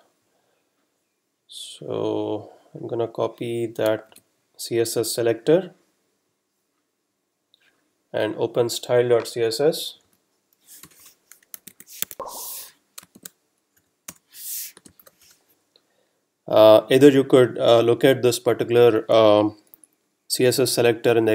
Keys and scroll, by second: 4.1 super+c, 5.2 F12, 10.0 super+Down, 13.0 shift+super+Return, 13.2 shift+super+v, 14.1 Return, 14.8 space, 16.1 Return.